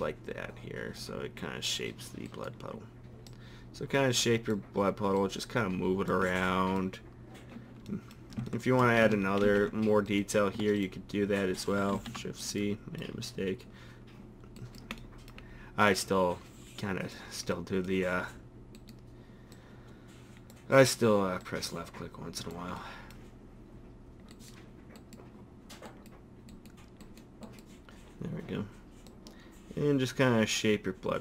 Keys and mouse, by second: 3.3 middle click, 4.0-6.4 drag, 6.4 middle click, 9.4 ctrl+r, 11.9 shift+c, 16.0-17.1 middle drag, 17.1 click, 17.5 middle click, 18.8 click, 19.5-21.4 middle drag, 21.4-22.8 drag, 22.8-24.3 middle drag, 24.3 click, 29.1-30.7 middle drag, 30.7-31.2 drag.